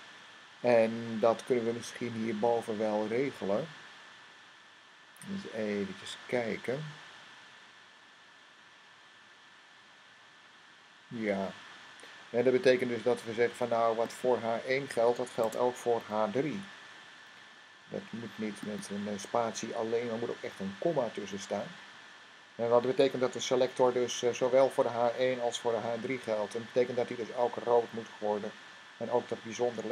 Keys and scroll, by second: 15.8 typing, 18.6 typing, 21.0 ,.